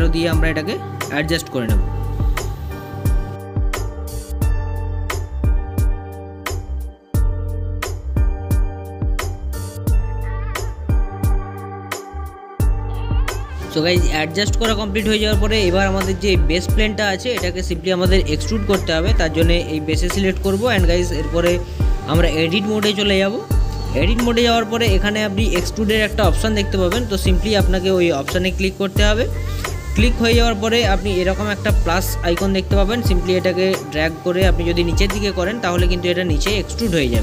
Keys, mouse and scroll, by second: 3.4 click, 3.9-6.2 middle drag, 6.1 click, 10.0 click, 10.5-12.8 middle drag, 12.8 click, 14.6 click, 15.5-17.9 drag, 18.5-19.9 drag, 19.9-22.4 middle drag, 22.3-25.4 drag, 26.4-29.5 middle drag, 33.0 click.